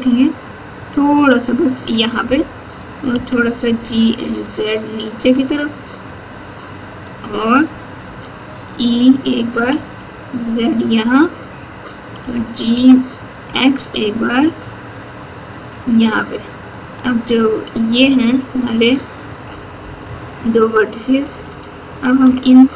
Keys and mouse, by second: 3.0 g, 8.0 e, 12.1 g, 16.9 click, 17.9 alt+z, 18.4 click, 20.0 KP_8, 21.4 alt+z, 22.2 KP_2.